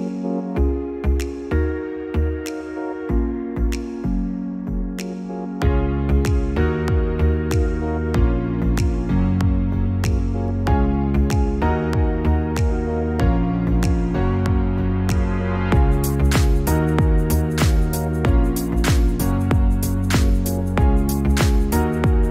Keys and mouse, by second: 4.4 click, 5.4 click, 8.9-10.4 drag, 15.9 click, 17.9 click.